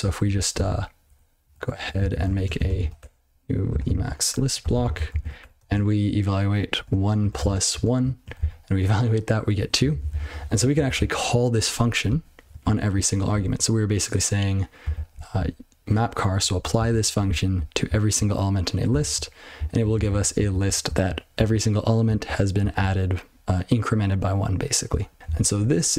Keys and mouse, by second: 0.2 ctrl+n, 0.5 ctrl+p, 1.4 ctrl+/, 1.8 ctrl+p, 2.1 ctrl+shift+o, 2.3-4.6 typing, 4.6 ctrl+f, 4.8 ctrl+n, 5.1 ctrl+p, 5.4 Tab, 5.6 (, 6.8 1, 7.5 space, 7.7 1, 8.4 ctrl+c, 9.8 ctrl+n, 9.9 ctrl+n, 10.1 ctrl+n, 10.3 ctrl+n, 10.5 ctrl+n, 10.7 ctrl+n, 10.9 ctrl+n, 12.6-12.9 ctrl+f, 13.3 ctrl+b, 13.5 ctrl+b, 14.8 ctrl+f, 15.1 ctrl+b, 15.3 ctrl+b, 16.4 ctrl+f, 16.7 ctrl+f, 17.0-17.5 ctrl+f, 17.8 ctrl+f, 18.0 ctrl+f, 19.1 ctrl+c, 19.5 ctrl+n, 19.9 ctrl+n, 20.0 ctrl+n, 20.1 ctrl+n, 20.3 ctrl+p, 20.6 ctrl+a, 20.8 ctrl+f, 21.3 ctrl+f, 22.0 ctrl+f, 22.6 ctrl+f, 24.9 ctrl+f, 25.1 ctrl+f, 25.2 ctrl+b, 25.2 ctrl+alt+space, 25.8 ctrl+g.